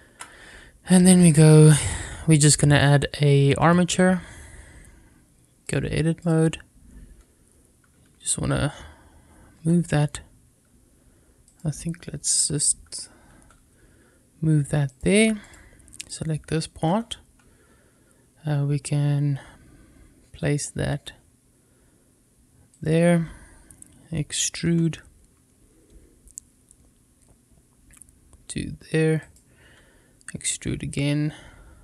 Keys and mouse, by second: 5.6 click, 9.4 g, 11.3 click, 12.2 a, 13.2 g, 14.7 click, 15.3 click, 15.8 click, 16.7 g, 22.6 click, 24.3 e, 24.5 e, 29.0 click, 29.6 e.